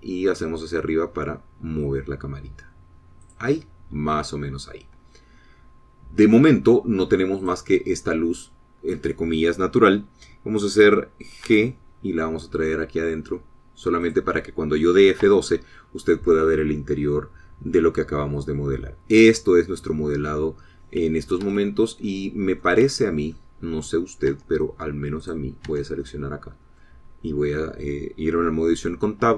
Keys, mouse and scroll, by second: 0.5 click, 4.5 click, 8.7 click, 12.8 g, 15.4 click, 16.6 F12, 19.7-20.2 scroll down 2, 20.6 scroll up 1, 21.2 scroll up 2, 21.9-22.4 scroll down 2, 22.8 Escape, 23.4 click, 24.2-24.6 scroll down 1, 24.6 click, 25.7 Tab, 26.6 click, 27.1 Tab, 27.4 middle click, 28.4-29.3 scroll up 1.